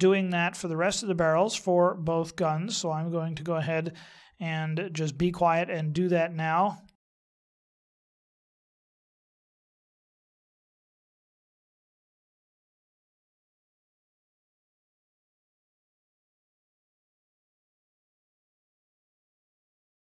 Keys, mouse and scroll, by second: 2.0 middle click, 5.6 middle click, 7.3 middle click, 7.7 middle click, 8.1 right click, 8.4 right click, 9.2 right click, 9.9 click, 10.2 click, 10.4 click, 10.5 click, 10.8 click, 11.6 click, 11.7 middle click, 12.3 right click, 12.4 g, 12.8 x, 13.1 middle click, 13.7 right click, 14.0 click, 14.5 click, 14.7 click, 15.1 right click, 15.3 right click, 15.5 click, 15.8 right click, 15.9 g, 16.2 ctrl+z, 16.4 right click, 16.6 click, 16.7 right click, 17.2 g, 17.4 x, 17.7 x, 17.9 middle click, 18.2 right click, 18.4 right click, 18.8 right click, 19.1 right click, 19.2 click, 19.5 click, 19.6 click, 19.8 click.